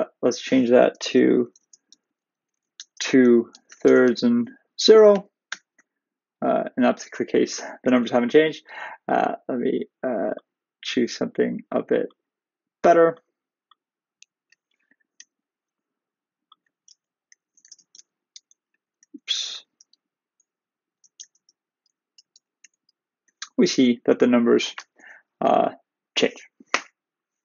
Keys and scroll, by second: 5.1 shift+Return, 22.3 shift+Return.